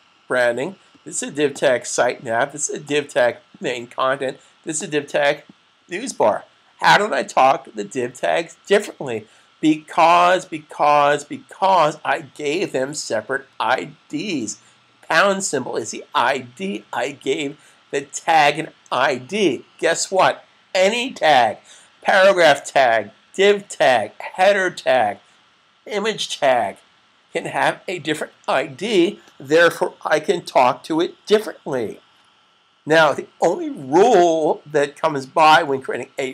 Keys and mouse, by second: 33.8 click.